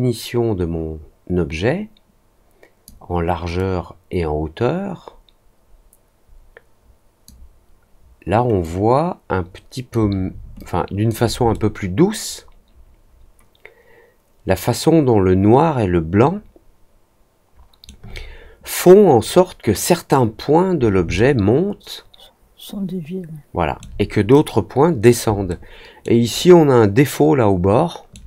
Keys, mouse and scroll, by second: 3.5-7.2 drag, 8.6-9.8 drag, 10.5 alt+click, 11.5-17.8 alt+middle drag, 21.1-23.7 alt+middle drag, 25.4 alt+middle click, 26.3-28.1 alt+middle drag.